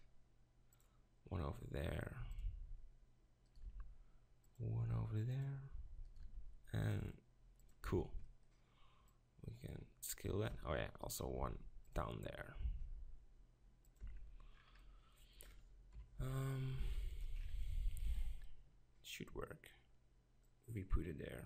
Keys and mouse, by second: 2.5 click, 3.7 ctrl+r, 6.2 ctrl+r, 7.8 Tab, 10.5 Tab, 11.4 ctrl+r, 14.0 Tab, 15.9 KP_7, 16.2 z, 16.8 g, 17.2-17.7 drag, 17.7 middle click, 18.0 z.